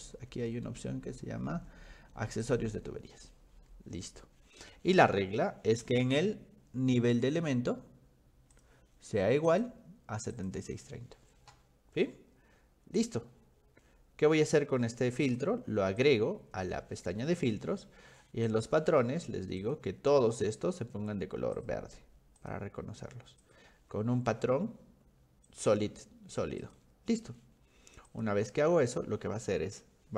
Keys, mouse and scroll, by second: 2.4 click, 5.0 click, 8.6 click, 9.5 click, 10.3 click, 13.0 click, 15.3 click, 16.0 click, 18.5 click, 19.6 click, 21.6 click, 22.4 click, 23.4 click, 24.1-24.6 scroll down 3, 24.5 middle click, 25.5 click, 26.6 click, 28.1 click.